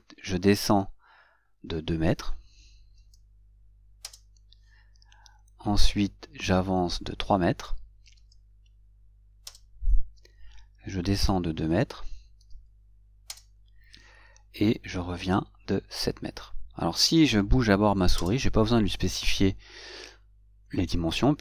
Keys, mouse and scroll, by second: 4.4 Return, 13.6 Return, 18.5 Return.